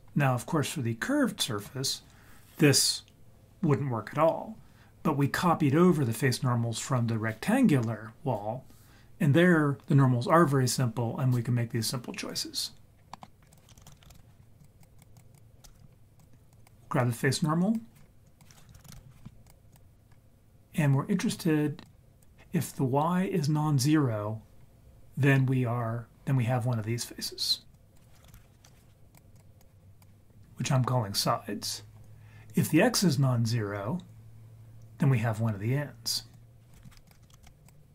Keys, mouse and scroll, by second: 13.0 scroll down 3, 13.1 middle click, 13.4 scroll up 2, 13.5 click, 13.7 shift+a, 15.0 click, 15.3-16.2 drag, 16.5 click, 17.5 click, 18.2-19.7 drag, 20.8-21.3 drag, 21.8 click, 27.7-29.4 drag, 29.6-30.0 drag, 36.3 click, 37.0 click, 37.4 shift+d.